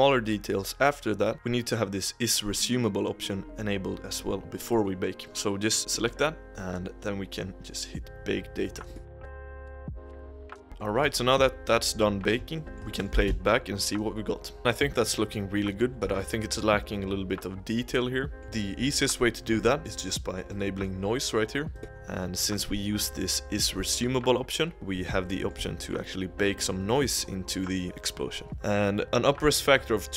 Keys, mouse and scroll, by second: 1.3 scroll down 18, 5.9 click, 6.5-8.9 scroll up 10, 8.9 click, 10.6-13.2 shift+middle drag, 13.2 space, 15.9 shift+middle click, 16.0 scroll down 1, 16.1-17.7 middle drag, 17.7 scroll down 4, 17.9-18.4 middle drag, 18.5-21.8 drag, 24.7-25.0 scroll up 7, 25.0 scroll down 1, 25.2-27.0 shift+middle drag, 27.0 scroll down 1, 27.2-28.5 middle drag.